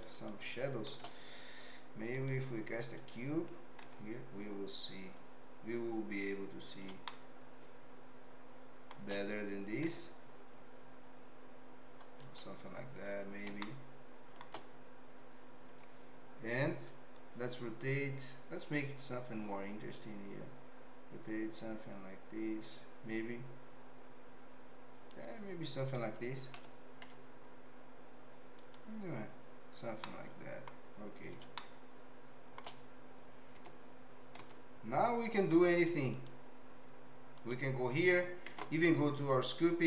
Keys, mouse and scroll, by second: 0.0 shift+right click, 0.9 shift+a, 3.8 Tab, 7.1-8.9 shift+middle drag, 9.8 s, 13.6 shift+middle click, 15.7 Tab, 17.1-25.1 drag, 26.5 r, 30.0 middle click, 31.6-32.6 shift+middle drag, 33.6 Tab, 34.4 Tab, 35.5 z, 37.3 click, 38.5 ctrl+Tab.